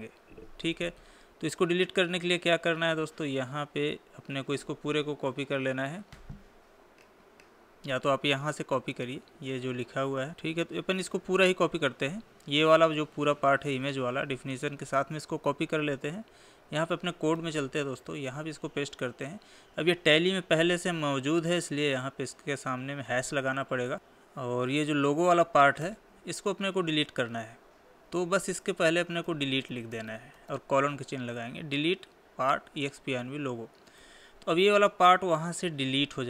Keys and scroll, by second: 15.3 ctrl+c, 18.8 ctrl+v, 34.5 Left.